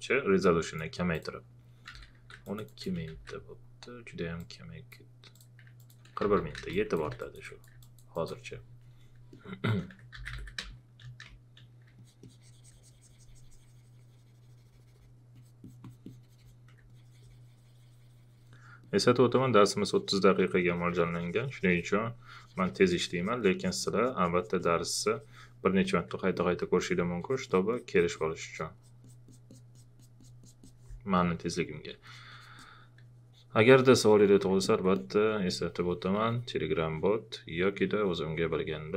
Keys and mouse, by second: 1.9 shift+f, 2.4 alt+click, 3.1 ctrl+z, 4.4 click, 6.2 shift+f, 6.7 space, 7.1 click, 7.8 alt+click, 9.3 alt+click, 9.9-11.2 typing, 10.7 click, 11.3 click, 15.3 alt+click, 26.3 alt+click.